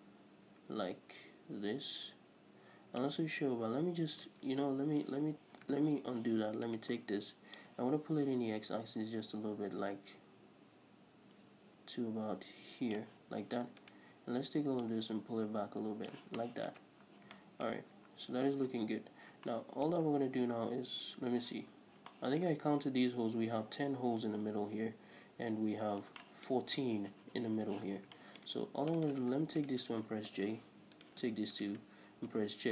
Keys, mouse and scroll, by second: 5.8 ctrl+z, 6.7 right click, 7.8-13.9 drag, 13.9 alt+right click, 14.9-16.5 drag, 16.5-29.1 shift+middle drag, 17.1-17.4 scroll down 2, 18.0-19.3 scroll up 2, 21.8-22.1 scroll up 1, 28.0 scroll down 1, 28.6-29.1 scroll up 2, 29.1 right drag, 29.7 shift+right click, 30.4 j, 31.1 right click, 31.7 shift+right click, 32.4 j.